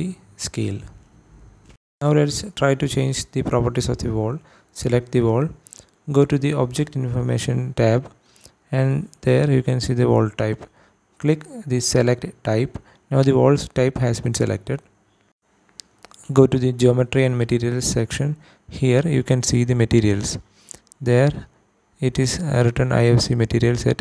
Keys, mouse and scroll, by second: 3.1 click, 5.5 click, 12.1 click, 16.3 click, 21.3 click, 22.6-24.0 drag.